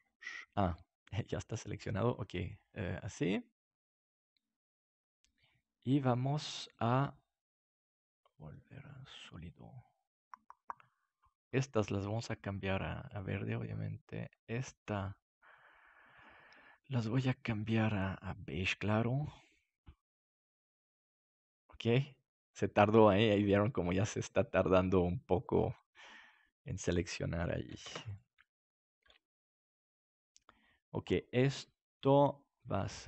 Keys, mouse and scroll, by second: 0.7-2.5 drag, 7.3-10.1 drag, 12.1-15.7 drag, 22.2-24.3 drag, 25.4-27.1 drag, 27.8 ctrl+s, 29.2-31.7 middle drag.